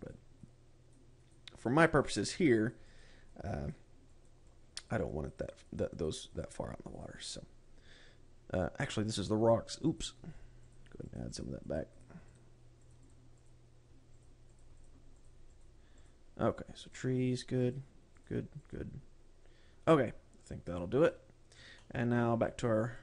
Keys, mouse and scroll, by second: 0.1 click, 0.5 click, 1.0 click, 1.7 click, 2.1 click, 2.4 click, 2.8 click, 3.1 click, 3.4 click, 3.8 click, 4.7 click, 5.0 click, 5.7 click, 6.1 click, 6.3 click, 6.5 click, 6.9 click, 7.5 click, 11.2 click, 11.6 click, 11.9 click, 12.2 click, 12.5 click, 12.9 click, 13.4 click, 13.6 click, 13.9 click, 14.7 click, 15.1 click, 15.3 click, 15.8 click, 16.0 click, 16.5 click, 17.3 click, 18.1 click, 18.6 click, 19.1 click, 19.9 scroll down 2, 21.1 click, 21.5 click, 22.2 middle click.